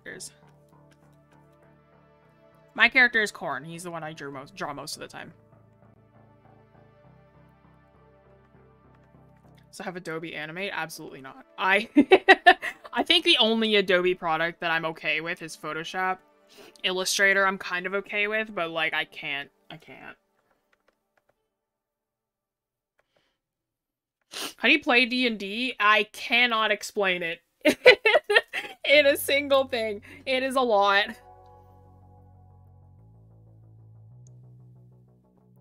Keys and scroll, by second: 8.4-9.1 scroll up 1, 9.4 scroll down 1, 10.9 scroll up 1, 11.5 scroll, 12.9 scroll up 1.